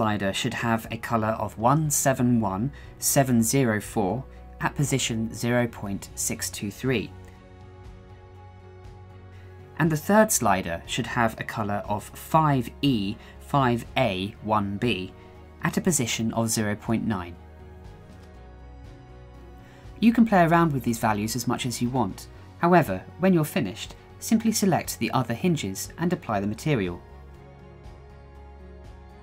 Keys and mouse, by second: 4.2-5.3 drag, 5.6-7.1 drag, 9.8 click, 10.6 click, 14.3-15.6 drag, 15.8 ctrl+z, 16.2 ctrl+z, 16.9 click, 20.5 click, 21.8 click, 22.5 middle click, 23.0-24.1 middle drag, 24.7 shift+middle drag, 25.3 shift+middle drag, 26.0 click, 26.5 click, 27.2 shift+middle drag, 27.7 click, 29.1 click.